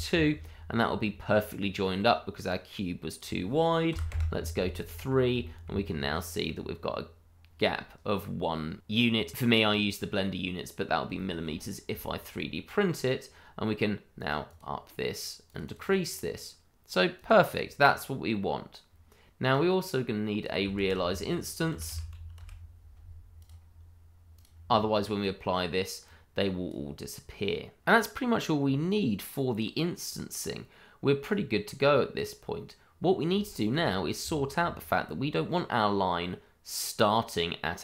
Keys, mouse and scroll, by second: 0.5-1.0 scroll down 1, 1.0 middle click, 3.1 click, 3.9 3, 4.1 Return, 4.9-5.3 scroll down 1, 5.4 shift+middle click, 5.8-6.2 scroll up 1, 6.2 middle click, 10.8 scroll down 1, 11.1 shift+middle click, 11.5-12.0 scroll up 1, 12.0 shift+middle click, 14.1 click, 14.5 double click, 15.4 click, 15.7 double click, 17.1 click, 17.4 double click, 18.8-19.5 scroll down 1, 19.5 click, 20.7-22.3 typing, 23.3 click, 26.1 click, 28.9-30.0 scroll down 1, 30.0 click, 32.9-33.3 scroll down 1, 33.5 shift+middle click, 33.8-34.2 scroll up 1, 34.2 shift+middle click.